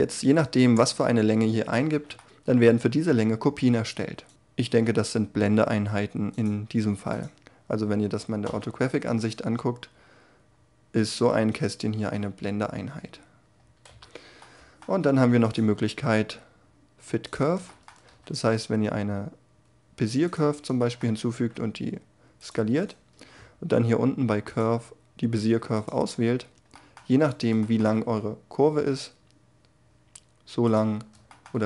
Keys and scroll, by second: 8.0 5, 17.6 shift+a, 21.3 s, 27.5 s.